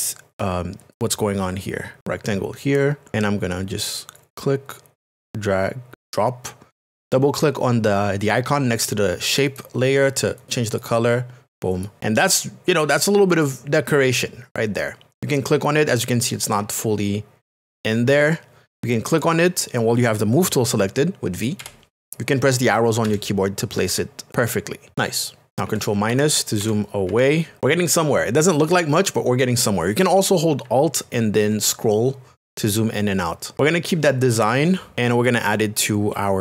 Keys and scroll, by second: 23.0 Down, 23.9 Right, 24.3 Up, 27.6 space.